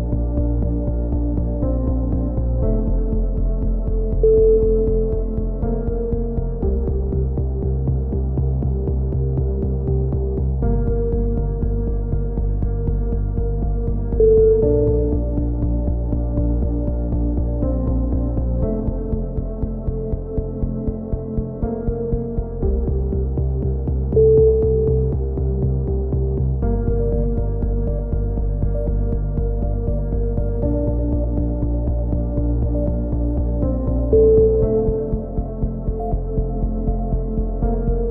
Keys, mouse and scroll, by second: 0.9 z, 1.3 click, 2.2-3.6 middle drag, 4.3 KP_7, 4.6 z, 6.7 s, 8.5-9.5 drag, 13.7 KP_3, 18.1 KP_7, 20.0 ctrl+z, 20.4 s, 22.5 KP_3, 24.2-25.6 middle drag, 24.7 a, 25.6 click, 27.6 click, 28.0 KP_3, 31.4 e, 33.5 ctrl+z, 33.8 ctrl+z, 34.2 ctrl+z, 34.4 ctrl+z, 35.5 KP_3, 36.2 e, 36.8 click.